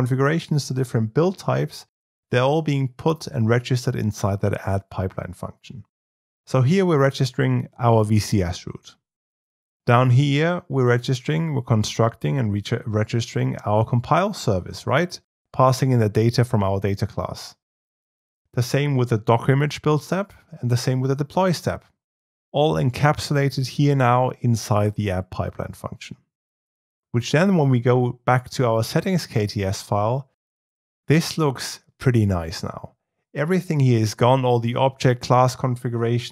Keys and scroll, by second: 30.4 alt+1.